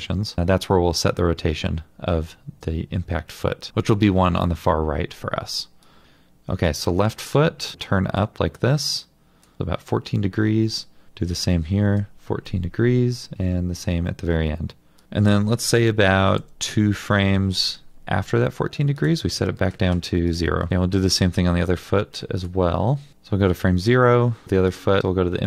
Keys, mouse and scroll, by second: 12.1 Return, 16.3 ctrl+r, 16.6 ctrl+Right.